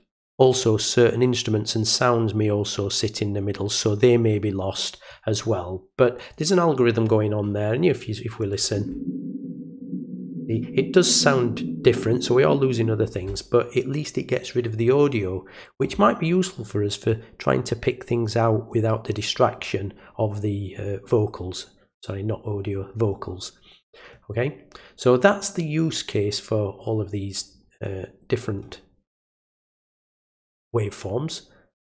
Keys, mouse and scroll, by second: 6.1 click, 8.4 click, 17.0 click, 18.2 click, 23.1-24.1 drag, 25.0-26.1 drag, 27.8 click, 29.2 right click.